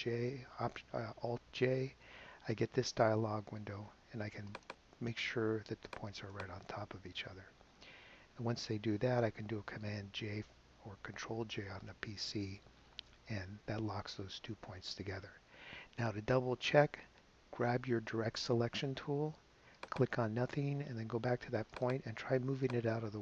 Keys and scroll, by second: 1.8 alt+super+j, 13.1 super+j.